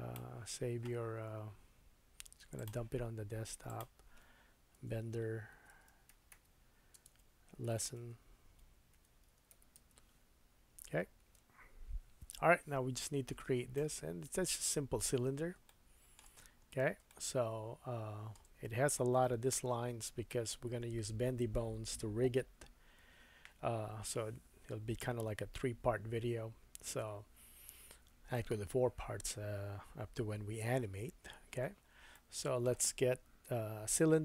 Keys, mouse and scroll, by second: 14.0-15.0 scroll up 5, 15.0-15.5 scroll down 4, 15.6 shift+middle click, 16.4-17.0 scroll up 4, 17.1 shift+middle click, 32.1 shift+middle click, 33.9-34.2 scroll up 4.